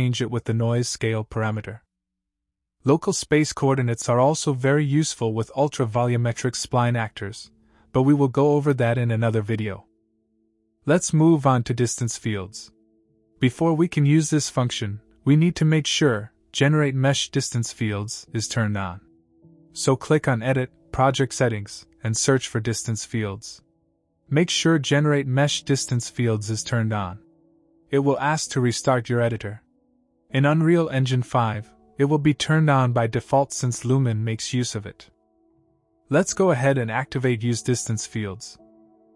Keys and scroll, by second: 24.8-27.0 typing.